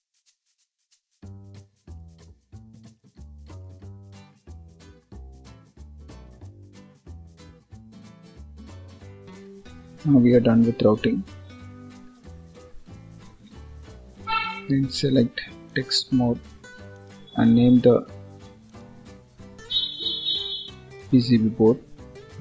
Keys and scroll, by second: 8.4 ctrl+s, 13.2 ctrl+s.